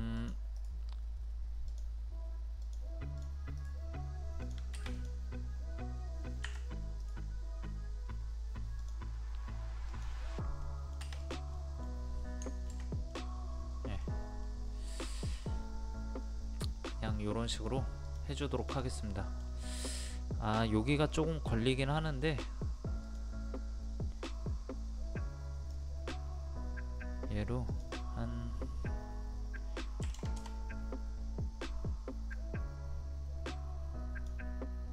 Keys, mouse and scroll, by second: 0.2 click, 0.6 right click, 1.7 click, 3.6 right click, 4.4 click, 6.5 Escape, 7.0 right click, 8.8 click, 10.6 middle click, 11.2 click, 11.6 middle click, 13.1 middle click, 14.0 scroll down 1, 14.5-18.1 middle drag, 18.1 click, 19.2 middle click, 19.6-21.3 scroll up 1, 21.3 middle click, 23.0-26.5 drag, 30.0 KP_2, 32.3-34.9 drag.